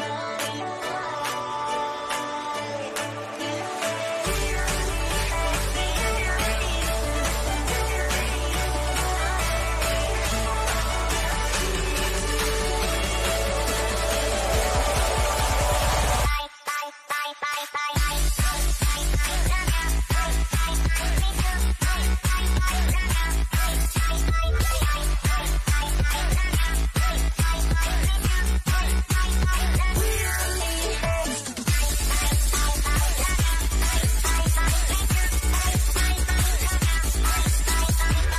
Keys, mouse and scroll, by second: 1.4 click, 7.2 click, 10.0-11.9 typing, 12.8 Return, 26.2 click, 27.4 g, 28.4 click, 34.0 scroll up 1, 36.8 click, 37.6 scroll down 1, 38.2 shift+middle click.